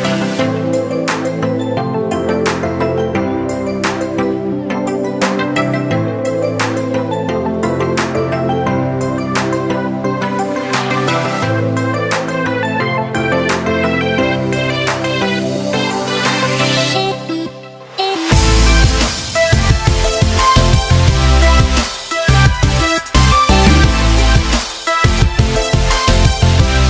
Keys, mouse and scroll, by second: 4.6-11.4 drag, 11.4-16.4 drag, 17.5-26.8 drag.